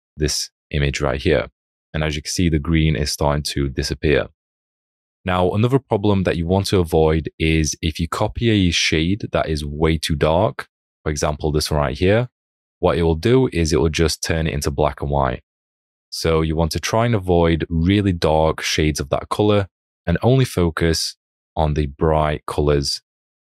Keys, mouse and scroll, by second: 0.2 alt+click, 1.7 alt+click, 3.5 alt+click, 5.0 alt+click, 18.4 ctrl+z, 21.5 alt+click, 23.1 alt+click.